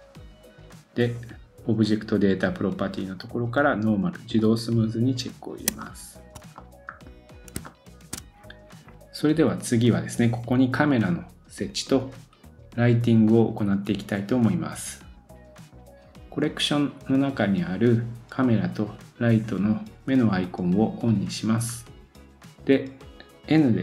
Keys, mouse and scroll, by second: 4.4 click, 5.7 shift+click, 5.8 shift+middle click, 6.5 middle click, 7.3 scroll up 1, 7.5 shift+click, 7.6 middle click, 20.4 click, 20.4 right click, 21.0 click, 21.0 right click, 21.6-22.2 scroll up 1, 22.3 click.